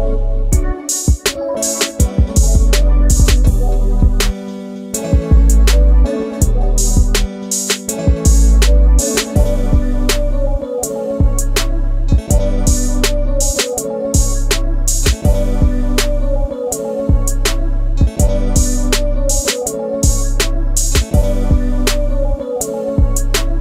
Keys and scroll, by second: 1.3 alt+shift+t, 13.4 space, 14.8 m, 18.2 space, 18.7 e, 19.3 space.